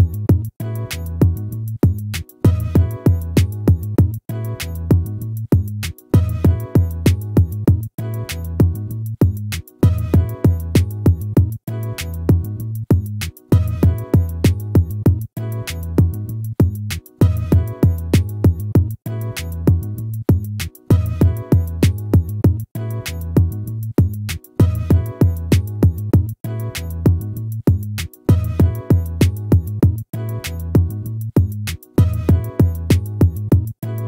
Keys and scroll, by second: 29.3 ctrl+-, 32.0 ctrl++.